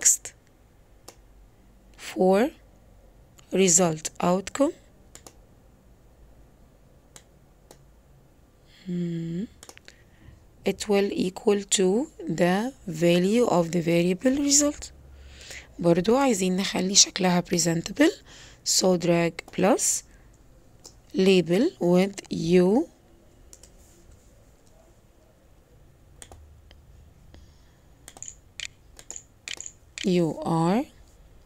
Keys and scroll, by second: 28.8 u, 29.4 o, 29.9 u.